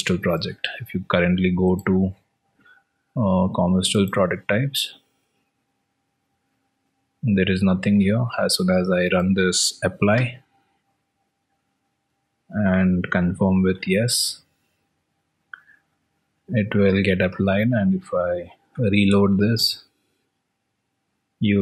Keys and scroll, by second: 1.4 alt+Tab, 11.4 alt+Tab, 19.0 alt+Tab, 20.6 ctrl+r.